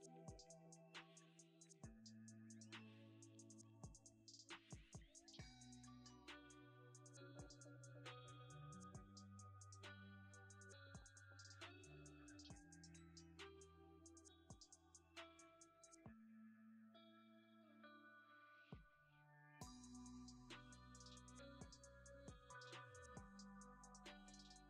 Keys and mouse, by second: 1.3 r, 1.7 click, 1.9 g, 2.7-3.9 middle drag, 4.4 middle drag, 4.8 g, 5.2 click, 5.5 middle click, 7.2 shift+click, 7.5 g, 8.0 click, 9.2 alt+click, 10.5 shift+d, 10.7 click, 12.2 g, 12.8 shift+middle click, 13.5 r, 13.8 click, 14.1 shift+right drag, 14.7 g, 15.1 click, 16.8 click, 19.4-21.8 drag, 23.0 g, 23.5 click, 24.4 click.